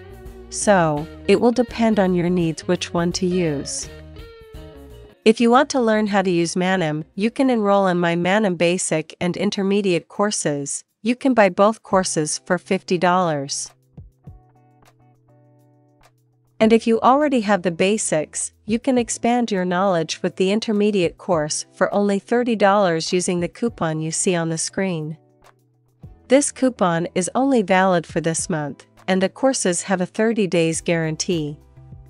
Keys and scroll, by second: 1.5 space.